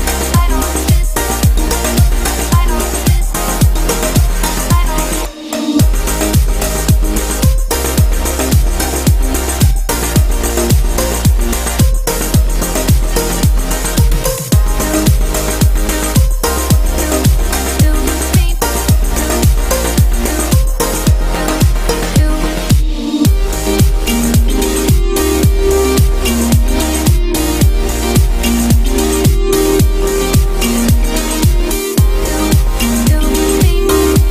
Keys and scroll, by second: 13.1 ctrl+t.